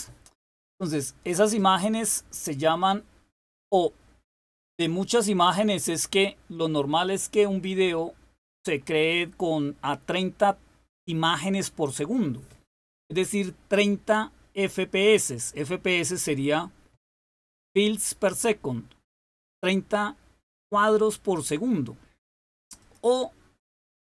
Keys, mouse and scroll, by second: 22.7 click.